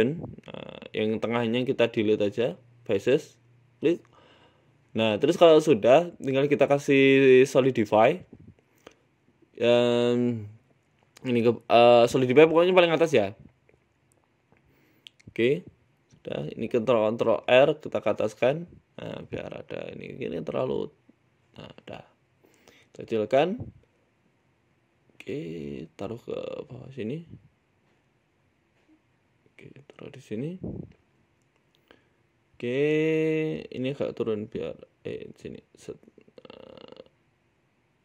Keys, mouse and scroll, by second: 0.0 click, 0.3-0.8 scroll up 4, 0.7 middle click, 0.9 Tab, 2.0 click, 2.7 right click, 3.4 Delete, 4.4 scroll up 1, 4.5 middle click, 5.0 Tab, 5.3 middle click, 6.5 click, 8.3 click, 8.7 middle click, 10.2 click, 12.0 middle click, 13.1 click, 15.4 Tab, 15.6 middle click, 16.3 ctrl+r, 18.7 Tab, 18.8 middle click, 20.0 shift+click, 21.1 middle click, 22.0-22.5 scroll down 2, 22.5 scroll down 1, 22.5 s, 23.2 w, 24.1 middle click, 24.5-25.0 scroll down 5, 24.8 KP_1, 25.5 s, 26.1 g, 27.4 KP_Decimal, 28.0 s, 28.8 scroll down 5, 29.0 z, 29.4 shift+middle click, 29.9 g, 31.7 s, 32.9-33.3 scroll up 4, 33.1 Tab, 33.5 a, 33.9 g, 35.3 g, 36.4 Tab, 36.7 f, 36.9 z, 37.3 right click, 37.5 g.